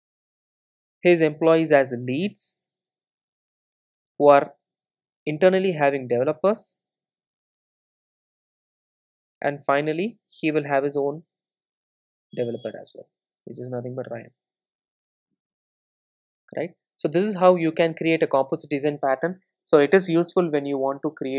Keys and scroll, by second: 18.4 ctrl+shift+super+F12.